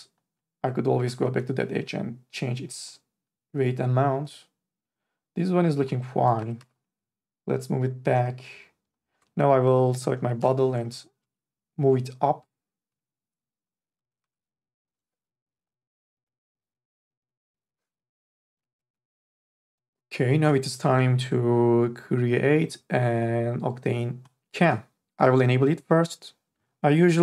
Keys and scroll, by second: 1.2 e, 6.4 3, 6.6 e, 10.1 3, 10.4 e, 12.9 4, 14.5 ctrl+z.